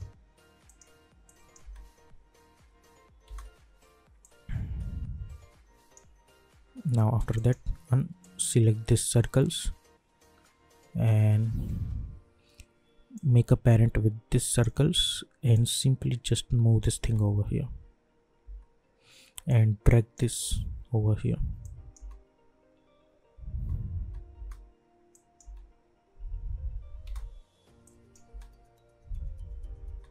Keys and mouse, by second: 1.6 space, 4.2-7.3 drag, 13.1-17.0 drag, 17.0 space, 19.4-21.6 drag, 21.9 space, 25.1 click, 25.4 space, 27.8 click, 28.3 space.